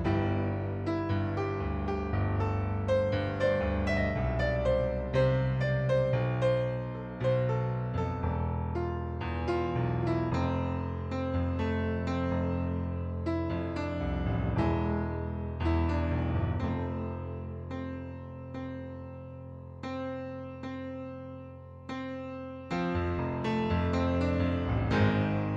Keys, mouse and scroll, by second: 0.4 click, 2.1 click, 3.4 right click, 4.1 click, 4.9 middle click, 5.5 click, 6.5 click, 7.9 click, 9.2 click, 10.4 middle click, 10.9 right click, 12.0 click, 12.9 KP_2, 13.1 Return, 13.7 right click, 15.5 click, 17.2 click, 18.3 ctrl+d, 19.1 click, 21.4 ctrl+d, 22.8 click, 23.7 right click, 24.2 shift+click.